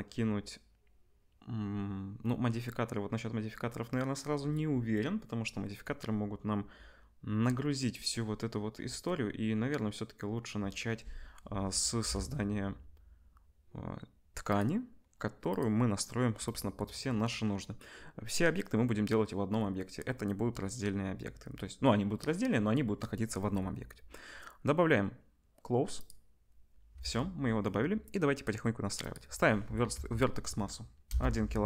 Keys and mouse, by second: 12.0 KP_1, 14.4 click, 14.6-15.5 middle drag, 15.5 click, 15.6-26.0 middle drag, 26.0-31.6 drag.